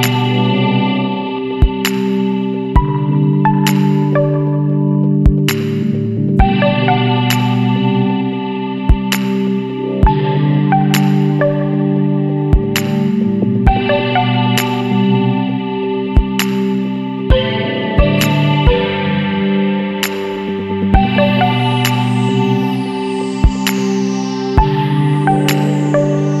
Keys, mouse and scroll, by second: 1.2-1.9 scroll up 2, 2.4-2.8 scroll up 1, 3.2-3.5 scroll down 1, 4.5 click, 6.6 click, 7.9 click, 8.5 KP_2, 9.9-10.2 scroll down 2, 10.5-11.3 scroll up 4, 11.8 scroll up 2, 12.7 scroll down 2, 14.1 click, 15.8 click, 17.4 scroll up 1, 18.1 scroll down 2, 18.6 scroll up 1, 18.8-19.9 scroll down 1, 19.9 click, 21.4 click, 23.1 click, 24.3 scroll up 1, 25.8 Escape.